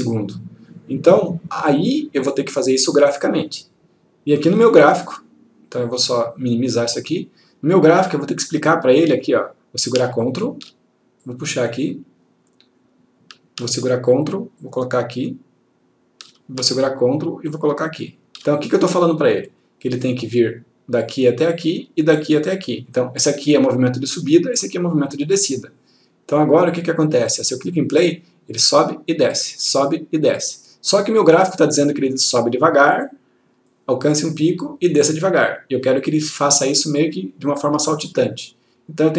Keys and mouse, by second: 0.4 click, 2.7-4.6 click, 6.3 click, 8.7-9.6 click, 10.3 ctrl+click, 14.2-16.6 ctrl+drag, 16.9 ctrl+click, 26.9 click, 31.4 click.